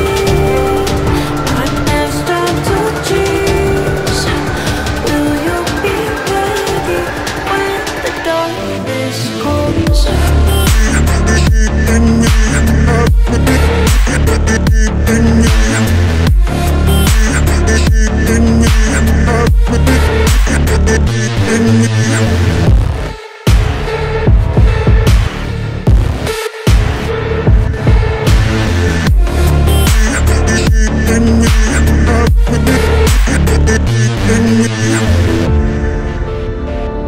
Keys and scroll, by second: 9.4 Delete, 15.9 ctrl+z, 24.1 Delete.